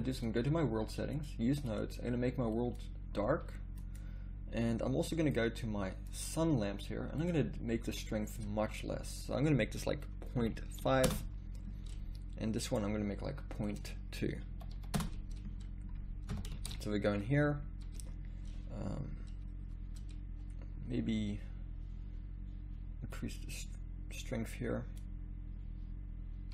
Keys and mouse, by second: 0.2-2.7 drag, 3.8-5.3 right drag, 5.3 middle click, 5.5-7.2 right drag, 7.2-11.6 drag, 12.7-15.5 drag, 16.3 KP_0, 16.8 shift+z, 23.2-26.5 drag.